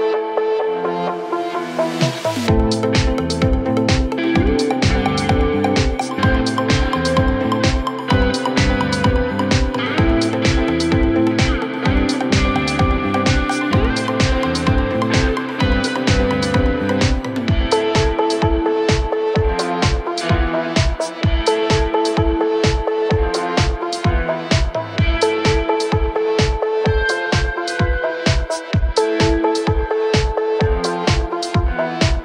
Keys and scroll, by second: 4.7 ctrl+z, 7.1 ctrl+z, 11.2 d, 12.7 shift+Page_Down, 13.1 ctrl+Page_Up, 14.8 f, 16.4 c, 20.7 F3, 21.1 Escape, 23.2 Escape.